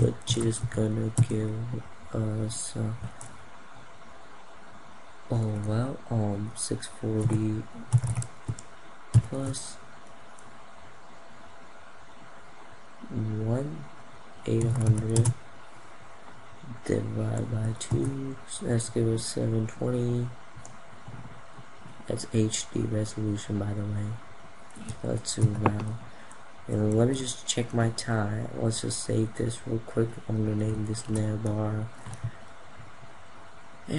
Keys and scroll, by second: 25.0 ctrl+0, 27.0 ctrl+s.